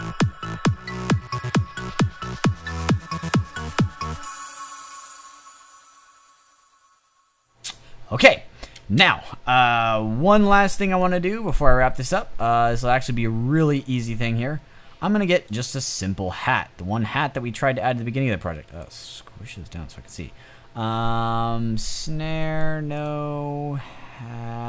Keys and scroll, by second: 8.8 space.